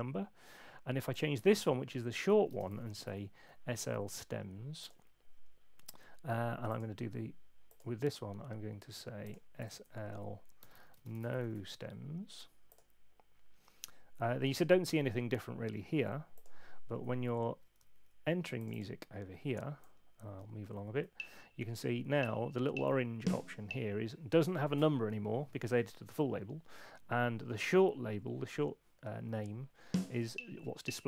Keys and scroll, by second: 2.3-3.5 typing, 9.8 Right, 10.4-12.0 typing, 17.8 super+2, 20.1 Right, 21.0 Down, 29.8 Up.